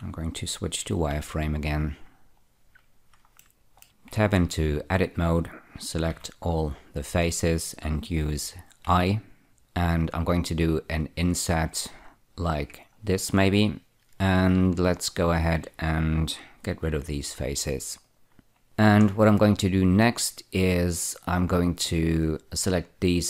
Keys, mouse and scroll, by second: 1.4 z, 2.7 scroll up 1, 3.7 shift+middle click, 4.4 Tab, 6.4 a, 7.3-9.2 scroll up 2, 9.2 i, 13.1 click, 13.8-14.3 scroll down 1, 17.6 x, 18.3 click, 18.6 2, 19.4 scroll down 1, 22.6 click.